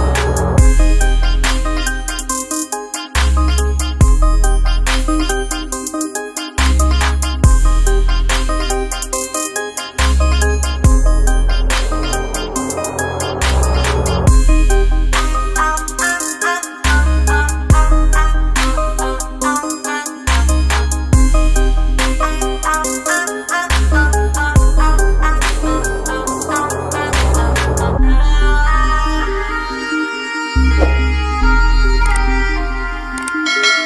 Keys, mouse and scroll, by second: 18.5 Delete, 21.8 ctrl+d.